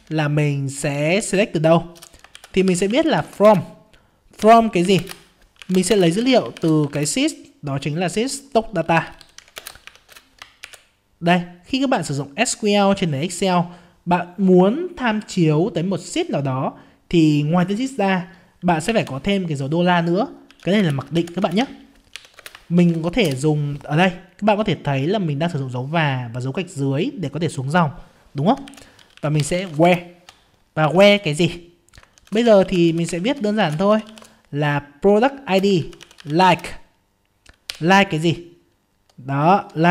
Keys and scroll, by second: 6.9 ctrl+space.